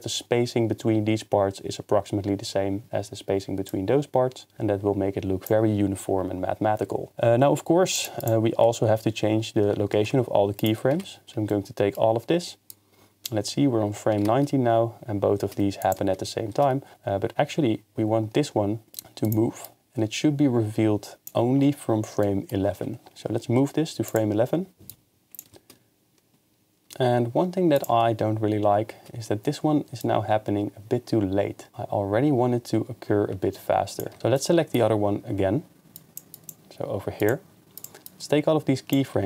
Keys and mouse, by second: 3.9-5.5 drag, 8.0 click, 8.2-9.8 drag, 10.0 ctrl+Tab, 10.6 click, 10.9 a, 12.7 click, 14.3 shift+space, 15.8 click, 18.9 g, 19.2-19.7 drag, 23.4 g, 24.1-25.0 drag, 25.5 shift+space, 27.8 click, 28.1 shift+space, 30.0-31.7 drag, 34.1 shift+space, 34.4-35.9 middle drag, 35.9 drag, 36.3 click, 37.2 click, 37.8 click, 38.0 click.